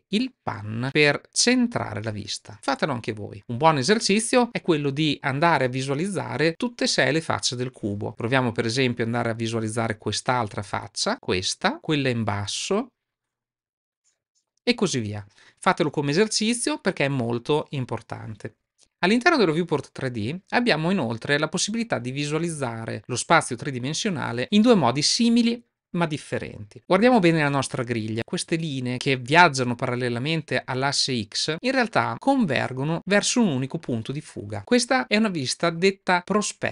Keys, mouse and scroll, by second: 0.8-4.2 shift+middle drag, 8.7-10.4 middle drag, 10.7-11.7 shift+middle drag, 12.5-14.4 middle drag, 18.7 middle click, 32.1-32.9 middle drag.